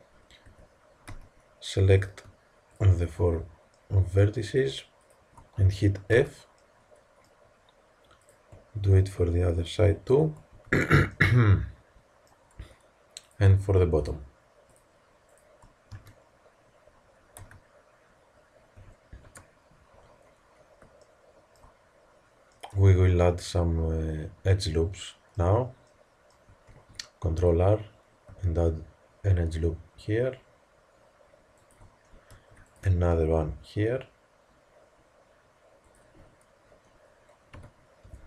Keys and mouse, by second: 0.4 Tab, 1.0 z, 3.6 click, 4.0-5.4 middle drag, 5.4-6.5 drag, 6.1 f, 6.5-7.7 middle drag, 8.1-11.1 drag, 10.4 f, 11.1 middle click, 11.8 click, 12.0 middle click, 13.2-17.0 drag, 15.8 f, 17.3 z, 18.7 a, 19.2 KP_3, 21.0 middle click, 24.4-25.8 middle drag, 26.6 ctrl+r, 32.2 ctrl+r, 37.4 KP_3.